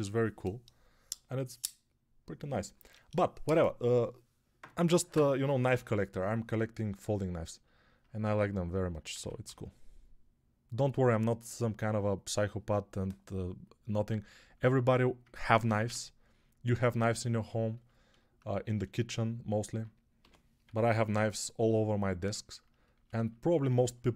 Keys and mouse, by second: 9.0 ctrl+z, 9.3 g, 14.6-24.1 alt+drag, 15.7 q, 20.1 g, 20.5 ], 20.8 ], 20.9 ].